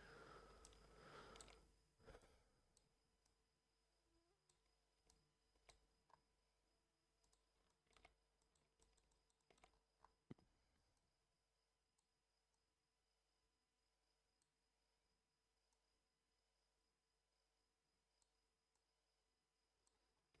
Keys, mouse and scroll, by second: 0.6 alt+shift+middle click, 2.1 click, 3.2-4.5 drag, 5.0-5.6 alt+middle drag, 6.0 scroll up 1, 7.2 click, 7.6 alt+shift+middle drag, 8.3 alt+shift+click, 8.8 alt+shift+middle click, 9.1 alt+shift+middle click, 9.3 shift+middle click, 9.6-10.2 scroll up 3, 10.9 click, 12.5 click, 15.7 click, 18.7 click, 20.1 scroll down 1.